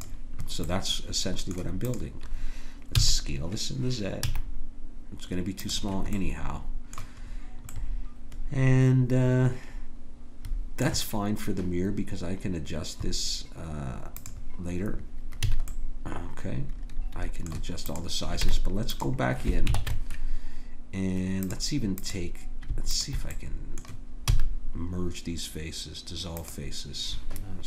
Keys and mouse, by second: 0.7-3.8 drag, 2.9 s, 6.2 click, 6.5-9.7 middle drag, 14.1-16.4 drag, 15.5 a, 17.9-19.7 drag, 18.4 Tab, 19.7 ctrl+Tab, 23.8-26.5 drag, 24.3 x.